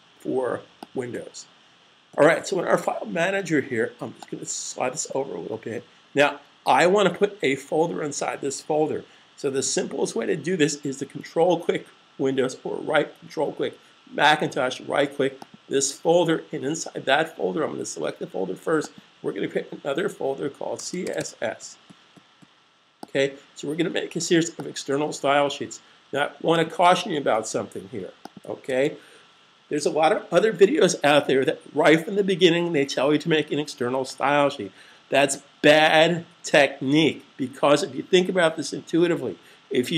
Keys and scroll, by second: 20.5-21.6 typing, 27.3 shift+super+f, 28.3 super+s.